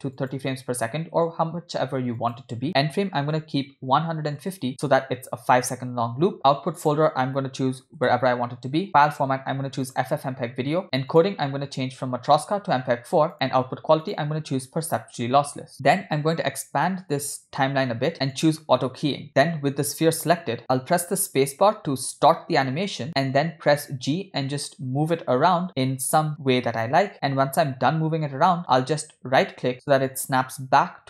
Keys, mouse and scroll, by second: 2.2-4.5 drag, 6.8-8.2 drag, 7.8 /, 8.8-10.1 drag, 10.7-12.3 scroll down 5, 11.1 click, 12.3 scroll down 1, 12.3-13.3 drag, 14.0-15.1 drag, 15.7-16.2 scroll down 9, 16.3-17.4 drag, 18.4 click, 19.2 click.